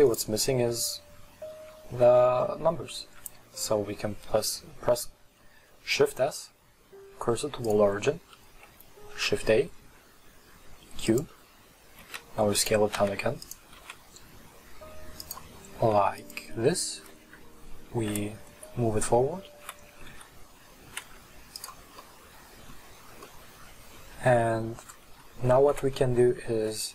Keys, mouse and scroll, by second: 3.1 shift+s, 9.2 shift+a, 12.1 s, 13.0 s, 13.8 s, 15.9 s, 17.3 KP_3, 20.0 g, 22.1-25.7 middle drag, 25.7 r.